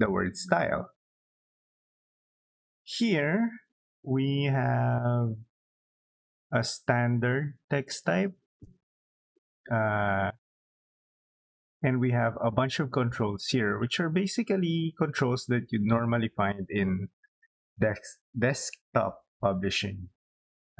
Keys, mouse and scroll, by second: 0.2 space, 10.2-11.3 drag.